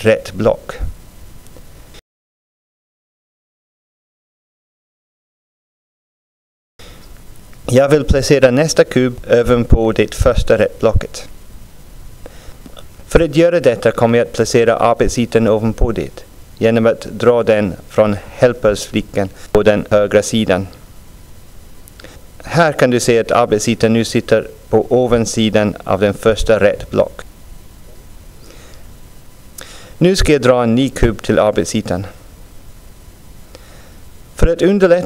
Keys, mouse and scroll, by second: 2.7-5.8 drag, 7.8 scroll down 1, 13.3-21.5 drag, 24.3 click, 25.4 click, 26.2 click, 26.9 click, 28.5 click, 29.2 click, 30.0 click, 32.4-35.0 drag.